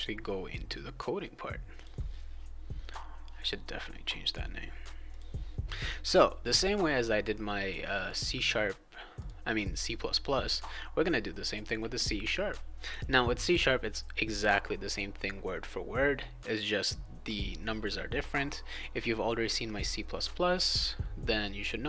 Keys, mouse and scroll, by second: 1.7 click, 5.1 click, 8.0 click, 9.2 click.